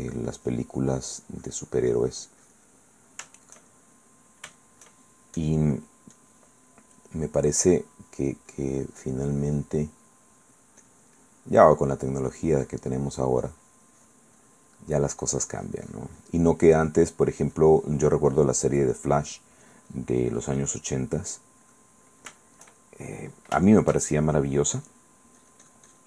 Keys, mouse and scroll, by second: 3.0 middle click, 3.9 shift+middle click, 4.8 shift+middle click, 5.6 click, 6.3 click, 7.2 click, 11.4 middle click, 12.3-14.5 drag, 14.6 middle click, 15.4-16.7 drag, 16.8 middle click, 17.4-19.2 drag, 19.3 middle click, 19.8-21.1 drag, 21.1 middle click, 22.5 shift+middle click, 23.0 shift+middle click, 23.8 shift+middle click, 24.8 shift+click, 24.8 shift+middle click, 25.6-26.0 drag.